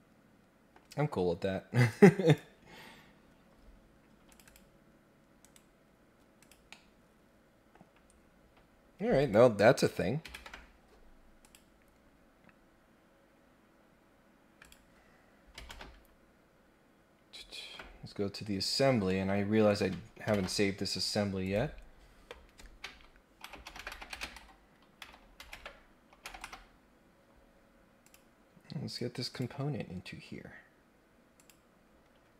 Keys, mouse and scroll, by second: 1.8 click, 2.2 click, 4.3 click, 5.4 right click, 6.4 click, 6.7-7.7 middle drag, 8.0 scroll down 1, 9.1 click, 11.4 click, 12.3 scroll up 4, 12.5 scroll down 2, 12.7 scroll up 2, 13.5 scroll down 2, 14.1-14.4 scroll up 2, 14.6 click, 15.7 ctrl+Tab, 18.5-18.9 scroll down 2, 19.0 scroll up 1, 19.6 click, 21.4 click, 28.0 click, 29.3 click, 31.4 click, 32.1-32.3 scroll down 2.